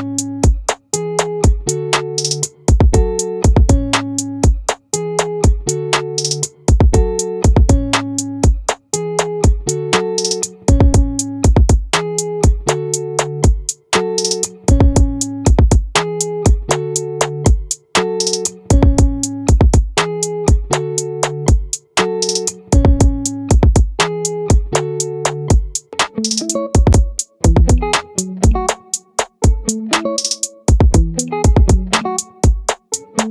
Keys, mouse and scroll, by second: 4.6-6.2 right drag, 8.4-10.2 right drag, 11.9-14.2 middle drag, 14.2-15.8 drag, 15.8-17.2 right drag, 20.2-22.2 right drag, 23.6-26.9 right drag.